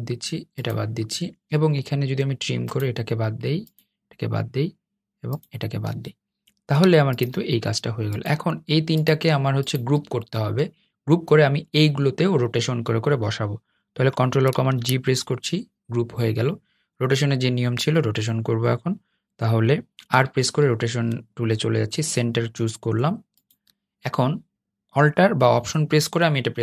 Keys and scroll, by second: 14.3 super+g, 15.9 r.